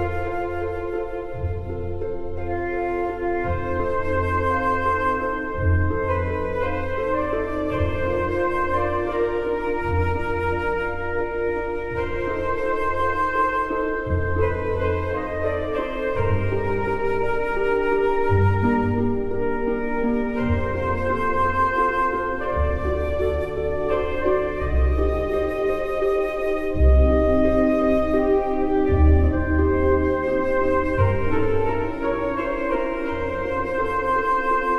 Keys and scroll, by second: 18.2-20.7 typing, 22.2 m, 25.8 KP_1, 27.2-29.0 typing, 30.2 m, 34.3 BackSpace.